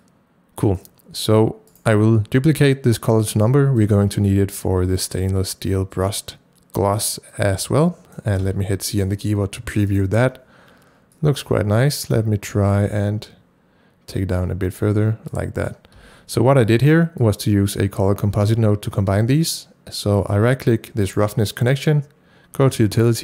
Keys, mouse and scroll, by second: 0.0-3.8 drag, 1.7 right click, 3.8 click, 5.0-9.8 drag, 8.4 c, 9.8 click, 9.9 double click, 11.1-23.2 drag, 16.0 c, 21.1 right click.